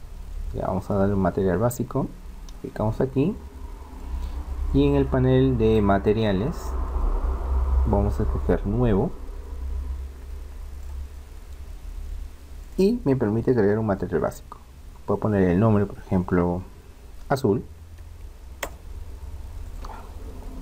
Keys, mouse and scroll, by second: 4.0-5.9 drag, 6.8-8.7 drag, 10.7-14.3 drag, 19.6-20.6 drag.